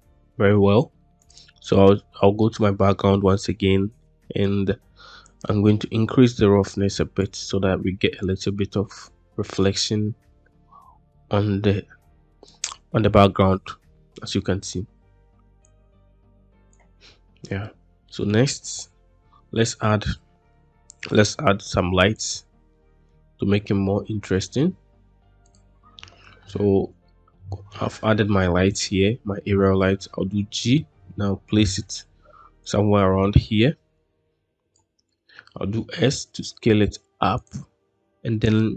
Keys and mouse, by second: 4.0 middle click, 5.2-7.1 drag, 15.6-16.7 drag, 17.9 middle click, 19.3 shift+a, 22.6-23.0 middle drag, 23.8 g, 24.1 middle click, 26.9-27.2 shift+middle drag, 29.3 g, 31.5 click, 32.6-34.7 drag, 35.4 s.